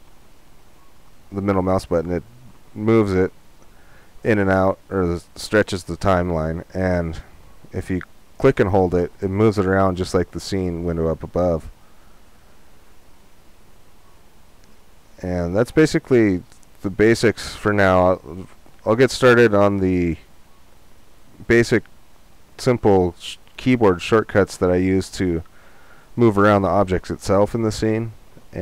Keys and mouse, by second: 4.1-9.9 middle drag, 27.1-28.6 middle drag.